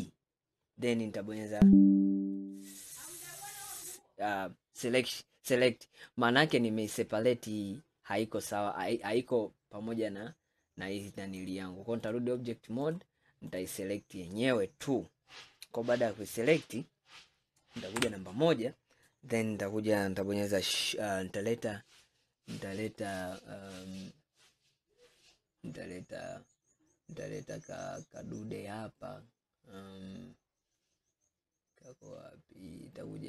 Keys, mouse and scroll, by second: 11.5-13.0 drag, 13.5 click, 14.8 scroll down 2, 16.0-18.0 middle drag, 18.0 KP_1, 19.3 scroll up 2.